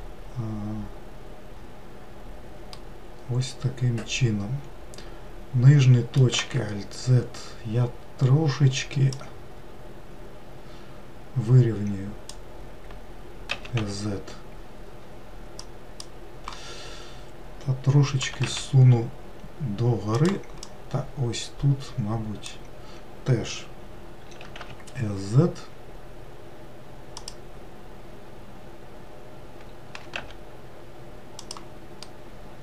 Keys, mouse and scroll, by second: 3.3-6.5 middle drag, 7.0 alt+z, 9.8 click, 14.2 s, 18.9 g, 21.3 click, 24.9 s, 30.6 g.